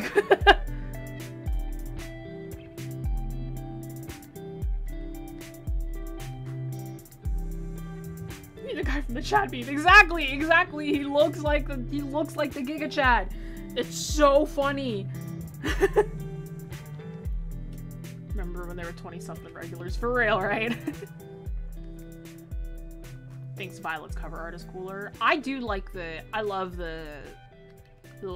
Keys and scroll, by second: 0.9 ctrl+z.